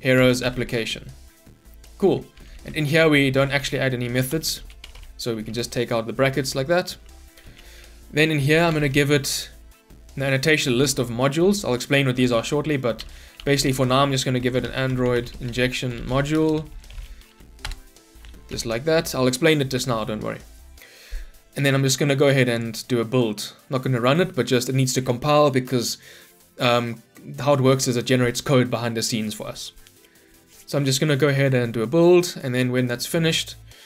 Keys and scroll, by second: 3.0 ctrl+y, 10.8 Return, 16.4 Return, 18.5 ctrl+alt+l, 22.7 ctrl+F9.